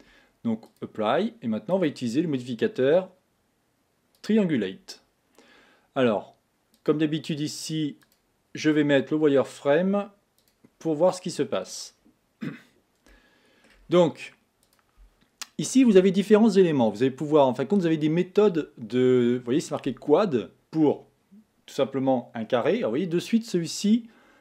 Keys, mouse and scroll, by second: 0.7 click, 1.7-4.7 drag, 6.7 click, 8.0 click, 10.4 click, 11.2 middle click, 12.0-13.1 scroll up 2, 13.1-14.6 shift+middle drag, 14.6 click.